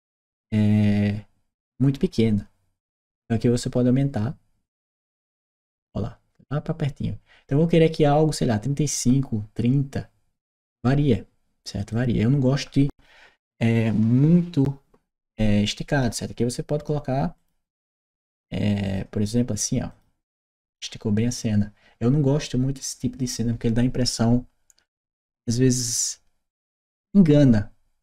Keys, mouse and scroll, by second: 4.6 click, 11.6 click, 15.4 click, 17.2 click, 18.6 click, 19.7 click.